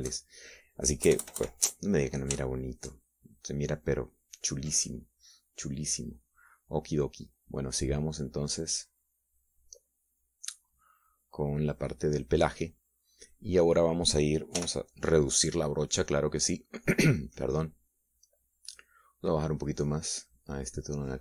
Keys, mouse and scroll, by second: 0.4-1.6 shift+drag, 2.5 KP_Add, 3.9 shift+middle click, 8.3-12.8 drag, 16.0 f, 17.4 click, 18.3 click, 20.4-21.2 drag.